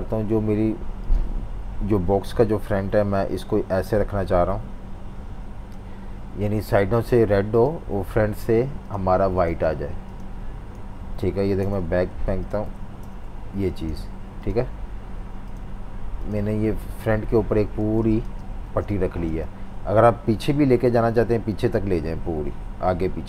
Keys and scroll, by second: 10.8 v, 17.8-19.2 typing.